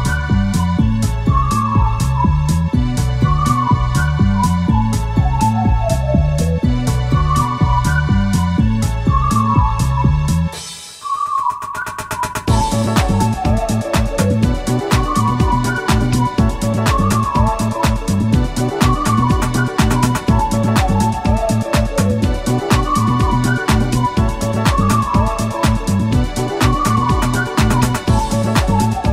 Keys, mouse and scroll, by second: 1.0 shift+F3, 3.1 click, 4.6 click, 6.9-7.9 drag, 9.3 shift+a, 10.8 shift+click, 11.6 shift+click, 12.1-12.7 scroll up 4, 13.3 shift+click, 14.1 shift+click, 15.5-16.1 shift+middle drag, 17.2-18.8 shift+drag, 19.5-20.7 drag, 21.0-21.9 drag, 22.5-23.2 drag, 23.5-25.3 drag, 25.9-26.2 scroll up 1, 26.4-27.1 middle drag, 27.6-28.2 middle drag.